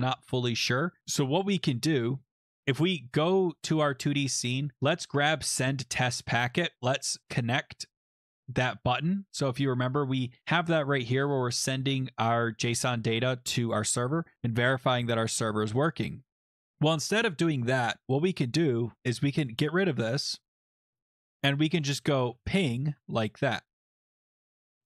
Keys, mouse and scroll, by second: 0.1 scroll, 1.1-2.3 scroll, 2.2 click, 3.2 click, 6.7 click, 7.4 click, 8.3 click, 9.3 click, 9.4 click, 13.4 click, 14.9 click, 17.7 click, 19.4 click, 20.9-24.5 typing, 23.7 Left.